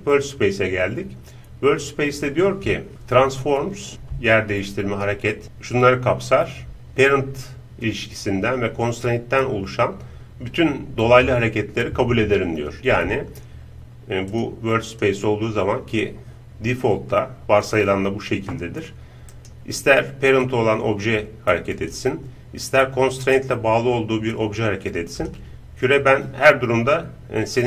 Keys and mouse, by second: 14.4-19.4 drag, 19.4-21.8 right drag, 20.5-22.4 drag, 23.3-25.1 right drag, 24.3-27.2 drag, 26.0-27.6 right drag.